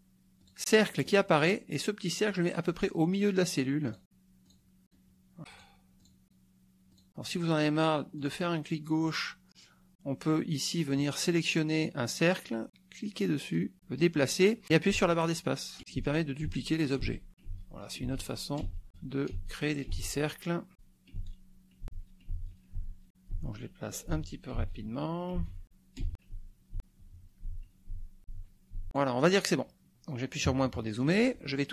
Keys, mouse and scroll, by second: 0.5 ctrl+click, 1.1 ctrl+click, 2.3 ctrl+click, 3.9 ctrl+click, 4.5 ctrl+click, 4.9 ctrl+click, 5.5 ctrl+click, 6.0 ctrl+click, 6.9 ctrl+click, 8.2 click, 13.5-29.2 drag, 14.9 space, 16.0 space, 20.7 space, 21.2 space, 21.9 space, 24.1 space, 25.4 space, 26.0 space, 26.3 space, 30.6 KP_Subtract.